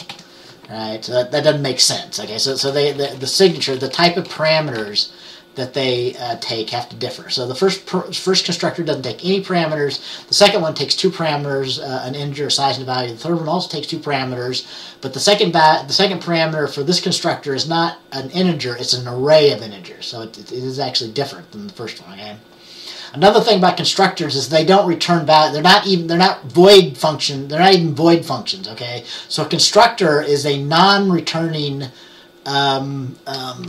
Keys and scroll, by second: 0.0-0.2 typing, 2.6-5.9 typing.